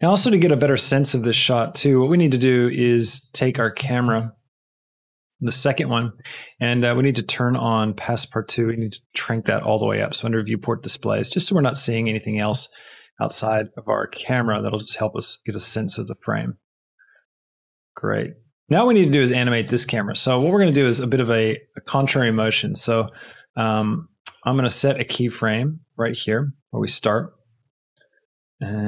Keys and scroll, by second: 13.4 space, 14.3 space, 18.7 space, 19.9 space.